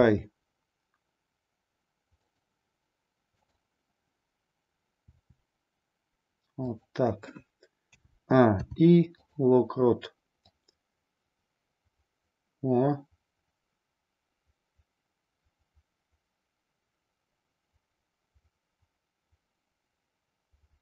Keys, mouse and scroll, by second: 2.2 click, 5.0 r, 6.7 click, 7.8 a, 8.6 i, 10.5-20.8 drag.